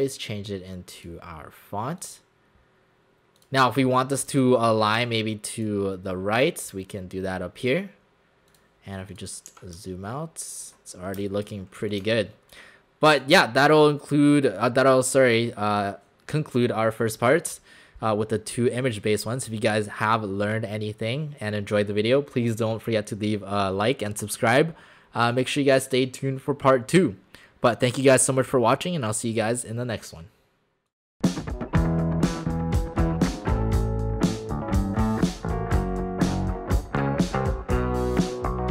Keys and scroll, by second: 9.5 w, 11.1 space.